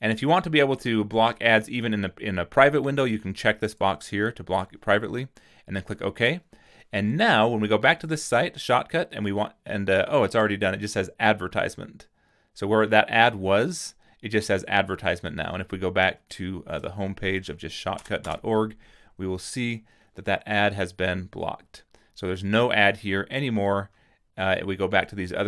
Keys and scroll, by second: 18.0 BackSpace, 18.3 Return.